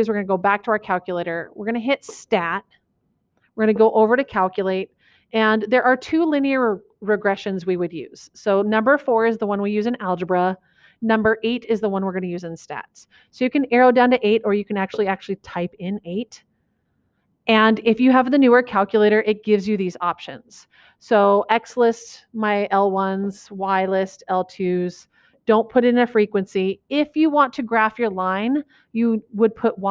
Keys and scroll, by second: 4.0 Right, 15.4 8, 21.9 Down, 23.5 Down, 25.6 Down.